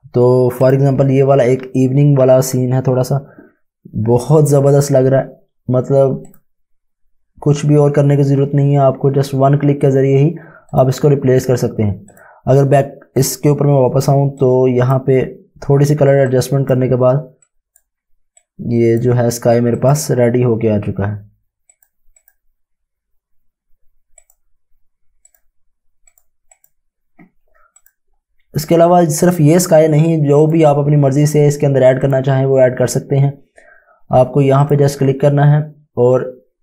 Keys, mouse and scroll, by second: 0.6 click, 6.3 click, 10.7 click, 34.6 click.